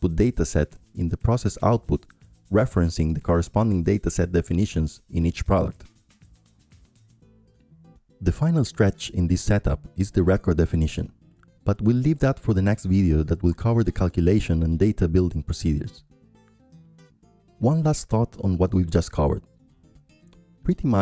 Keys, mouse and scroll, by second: 4.6-8.0 drag, 8.3-14.7 drag, 14.9-17.1 drag, 18.2-21.0 drag.